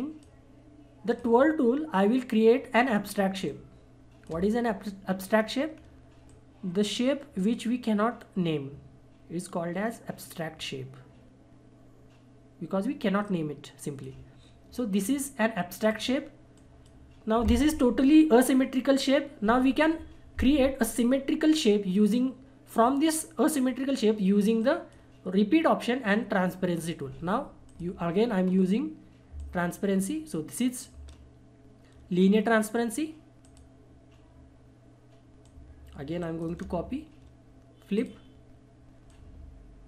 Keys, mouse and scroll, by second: 3.5-5.3 shift+drag, 5.3-5.7 scroll up 1, 6.3-15.8 drag, 24.6 click, 24.6 click, 27.7 click, 28.5-29.3 scroll up 1, 29.4-33.4 shift+drag, 33.4 click, 36.2 shift+right click, 37.9-39.8 drag.